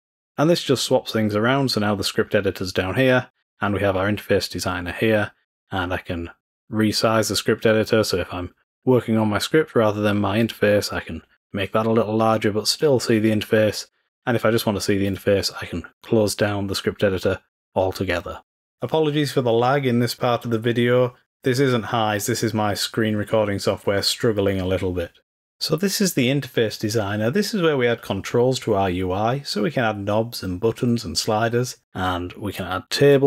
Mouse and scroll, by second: 3.8-6.8 scroll up 1, 7.7-10.3 drag, 15.0 click.